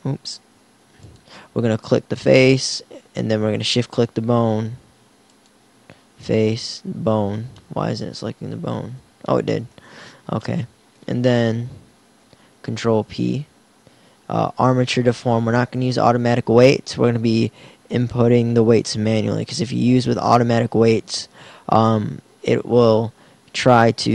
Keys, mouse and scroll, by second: 0.5 ctrl+z, 12.2 KP_1, 13.1 ctrl+p.